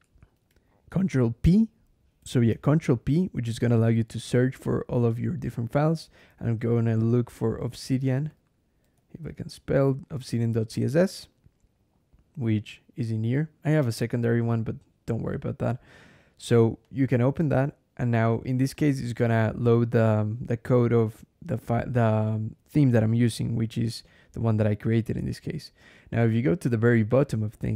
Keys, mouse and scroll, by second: 3.5 ctrl+p, 5.8-10.6 typing, 16.7 click, 19.1 click, 21.4 click, 22.9 click, 24.2 click, 25.8-27.7 scroll down 5.